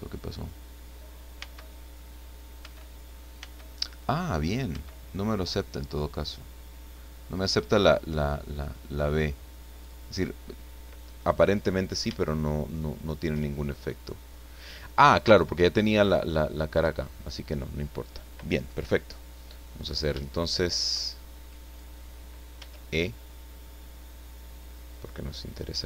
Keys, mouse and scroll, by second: 1.3 b, 2.6 b, 3.4 b, 4.7 b, 9.8 click, 11.1-11.5 scroll down 2, 11.5 middle click, 12.2-14.2 shift+middle drag, 14.7-15.1 scroll up 2, 15.3 middle click, 17.1 scroll down 2, 18.7 scroll down 2, 19.6 middle click, 20.8 shift+middle click, 21.0 shift+scroll down 1, 22.5 e.